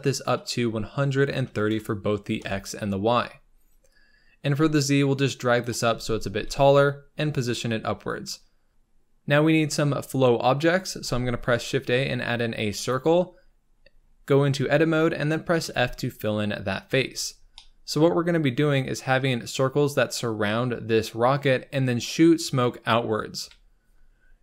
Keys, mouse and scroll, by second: 2.2-5.9 drag, 5.9 z, 6.3 g, 8.2 click, 8.7-10.9 scroll up 3, 10.9-12.8 scroll up 1, 12.8 shift+a, 13.4-14.3 scroll up 13, 14.3 Tab, 15.6 f, 16.8 Tab, 17.1-17.5 scroll down 5, 17.5-18.9 middle drag, 18.9-19.8 scroll up 3, 23.3 KP_7, 24.3 scroll down 2.